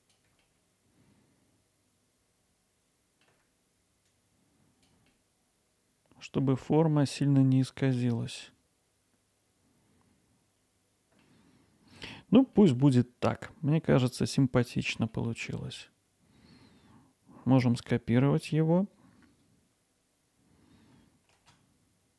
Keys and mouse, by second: 0.6-3.2 alt+middle drag, 4.1 click, 7.4-10.5 drag, 10.5 alt+Tab, 10.5-11.3 alt+middle drag, 12.1 alt+middle click, 13.5-14.4 alt+middle drag, 14.7-15.4 drag, 21.4 shift+d.